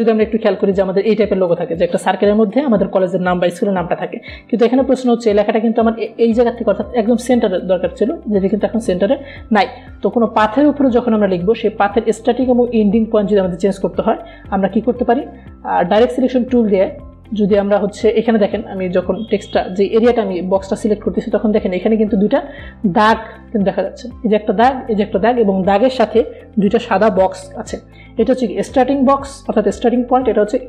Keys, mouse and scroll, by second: 0.6-0.9 alt+scroll down 1, 1.7-2.1 alt+scroll up 1, 3.0 click, 17.2 click, 20.2 click, 21.9 alt+scroll up 1, 23.1 space, 23.2 click, 23.8-25.3 alt+scroll up 1.